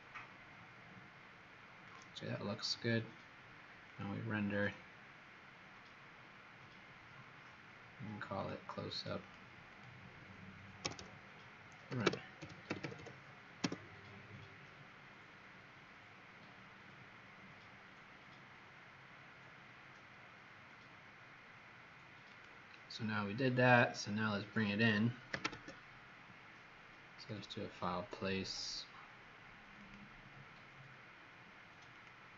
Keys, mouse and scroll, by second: 8.9 click, 9.1 click, 9.6 click, 10.8-13.4 typing, 13.6 Return, 22.3 click, 25.3 ctrl+0, 27.1 click.